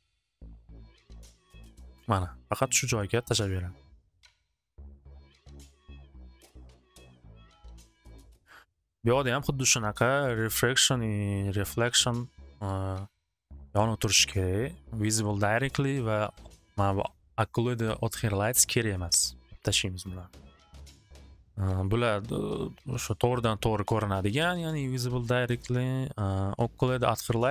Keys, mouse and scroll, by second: 5.2 click, 6.0 click, 6.4 click, 7.2 click, 7.7 click, 8.5 click, 8.6 6, 8.8 Return.